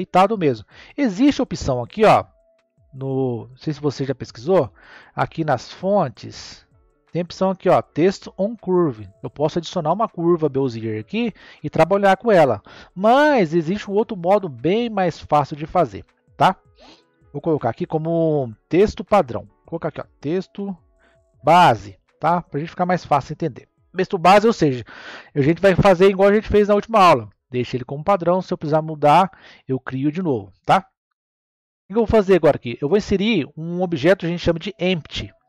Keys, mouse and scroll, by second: 0.6-1.6 scroll down 4, 1.6-5.3 scroll down 5, 6.0-7.0 drag, 7.0-8.4 scroll down 3, 8.4-11.6 drag, 14.2-17.1 middle drag, 17.1 click, 17.3-20.5 drag, 30.8-33.8 scroll up 1, 33.8 scroll up 1.